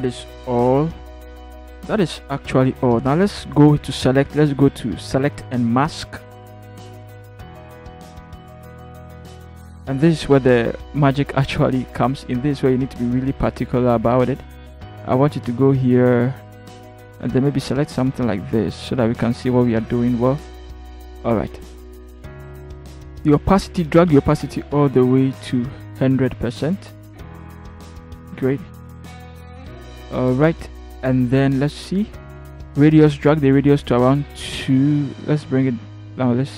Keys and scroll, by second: 0.2 ctrl+0.